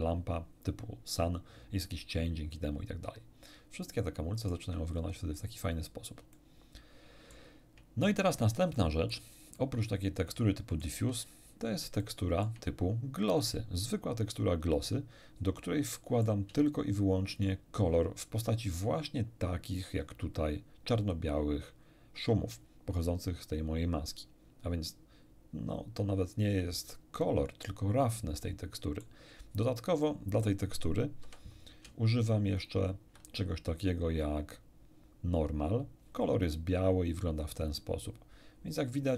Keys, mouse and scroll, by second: 2.7 scroll down 2, 3.3-3.7 scroll down 2, 3.8 shift+middle click, 4.9 shift+middle click, 5.1 shift+scroll up 1, 5.9 scroll up 1, 6.3-7.5 shift+middle drag, 7.9-8.4 shift+scroll down 1, 8.7 shift+middle click, 9.5 shift+middle click, 10.3 shift+middle click, 11.2-11.5 shift+scroll up 1, 12.0 shift+middle click, 13.3 shift+click, 15.6 middle click, 17.3 ctrl+shift+click, 28.3 middle click, 30.0 click, 30.4 click, 31.2 m, 32.6 ctrl+shift+click.